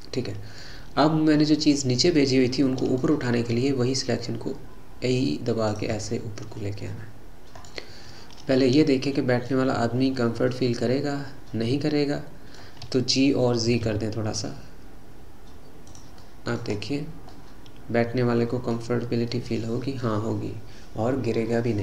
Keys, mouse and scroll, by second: 0.8-1.6 scroll down 5, 1.6-3.6 middle drag, 3.6 e, 6.0-7.8 middle drag, 7.8-8.6 scroll up 4, 8.6-9.7 middle drag, 9.7-10.2 scroll down 3, 10.2-13.3 middle drag, 13.7 g, 16.2 middle click, 16.7-17.4 scroll up 5, 17.4-20.1 middle drag, 20.1-21.2 scroll down 3, 21.2-21.6 scroll down 2, 21.6 middle click.